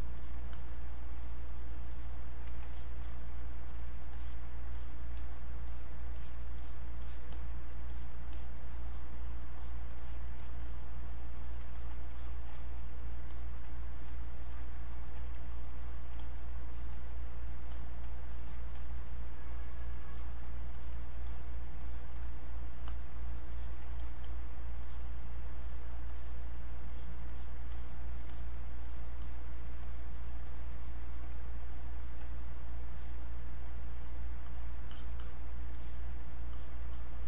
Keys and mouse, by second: 3.0 click, 4.1 click, 11.7 click, 15.0 alt+click, 21.3 alt+click, 21.8 click, 24.0 alt+click, 24.2 click, 28.3 alt+click, 28.9 click, 29.8 alt+click, 31.6 click, 34.0 alt+click.